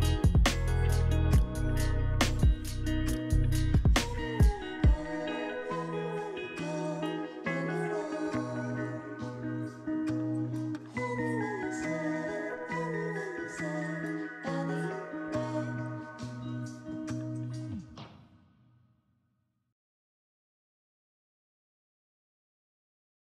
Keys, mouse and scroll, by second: 4.3 5, 7.7 middle click, 8.5 shift+g, 11.6 shift+g, 13.2-14.0 typing, 15.0 Return, 16.8-17.5 scroll up 2, 17.5 scroll up 1, 17.7 scroll down 1, 17.8 alt+middle click, 20.2-20.6 alt+scroll down 2.